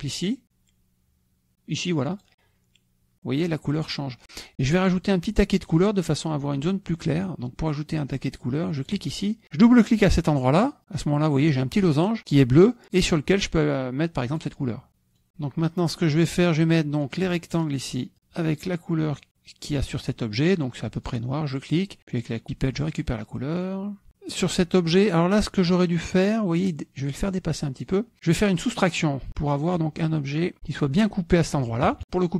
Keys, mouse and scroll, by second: 3.0 click, 9.4 click, 11.4 click, 13.8 click, 15.2-17.3 drag, 18.6 click, 22.0 click, 23.7 click, 25.3 click, 26.6 click, 27.4 click, 28.1 click, 30.8 click, 32.0 KP_Subtract.